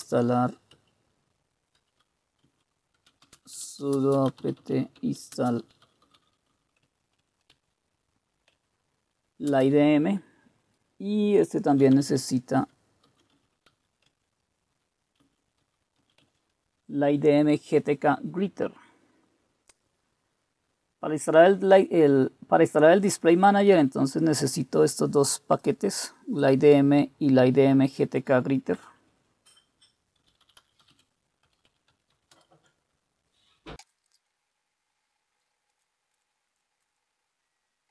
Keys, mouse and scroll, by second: 0.0-8.1 typing, 7.2 Tab, 8.6 Tab, 9.3-10.0 typing, 11.5-16.5 typing, 28.8 Return, 28.8-30.2 drag, 29.9-32.6 typing, 33.8 Return.